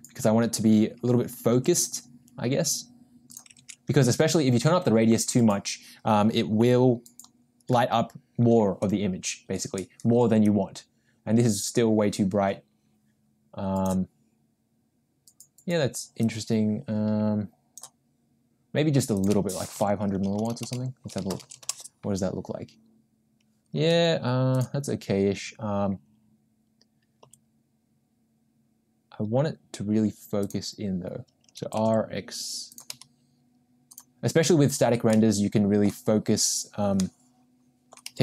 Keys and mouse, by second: 1.7 r, 4.5 ctrl+z, 10.4-14.1 drag, 16.2-18.0 drag, 19.1-22.4 drag, 20.5 0, 23.9 g, 27.3 g, 31.8 r, 33.0 g, 36.9-38.1 middle drag, 38.1 g.